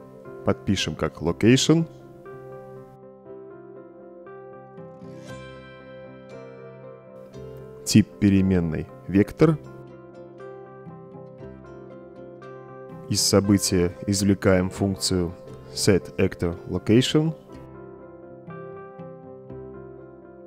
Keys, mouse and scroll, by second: 1.4 click, 3.5-6.1 typing, 7.4 click, 9.4 click, 11.5 click, 14.1-14.8 drag, 15.7-20.4 typing.